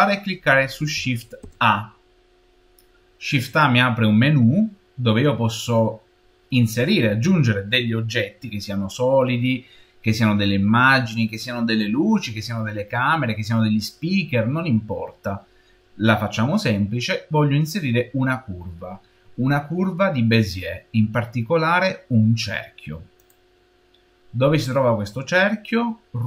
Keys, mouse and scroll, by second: 1.3 shift+a, 26.0-26.2 middle drag.